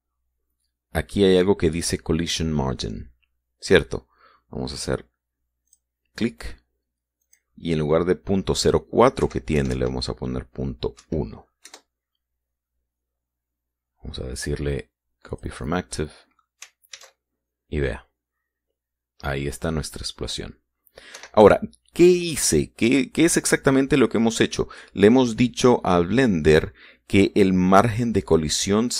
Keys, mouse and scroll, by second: 6.4 click, 8.0 click, 10.0 Right, 10.3 BackSpace, 11.7 KP_1, 12.4 KP_Enter, 13.9 scroll down 2, 16.1 click, 16.7 middle click, 17.7 alt+a, 21.9 Escape.